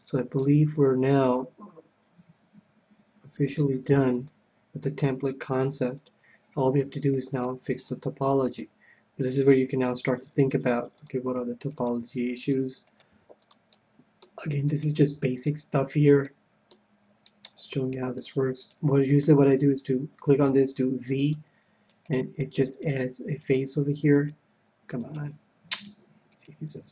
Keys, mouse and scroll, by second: 3.7 KP_1, 4.3-6.0 middle drag, 6.0-7.8 drag, 7.0-9.8 middle drag, 9.3-11.2 right drag, 10.4 g, 11.2-13.9 drag, 11.7-13.9 right drag, 12.0 g, 13.1 g, 13.7 middle click, 14.9 g, 15.7-16.9 drag, 15.7 right click, 16.2-18.1 middle drag, 17.7-19.8 right drag, 17.7 g, 18.3-20.0 drag, 19.8 middle click, 20.0 right click, 20.5 v, 22.1 click, 22.1-26.9 right drag.